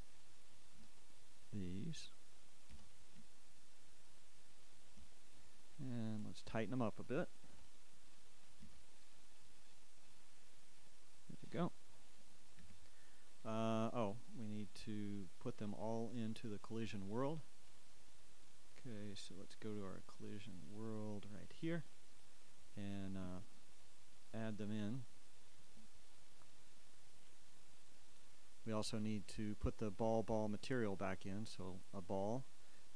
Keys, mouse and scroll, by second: 1.8 KP_7, 5.3 g, 8.6-9.1 ctrl+scroll up 1, 9.1 ctrl+right click, 9.1 x, 11.6-13.0 drag, 13.0 KP_1, 16.1 middle click, 28.4-32.9 shift+drag, 28.4-32.9 shift+middle drag, 28.4-32.9 shift+right drag.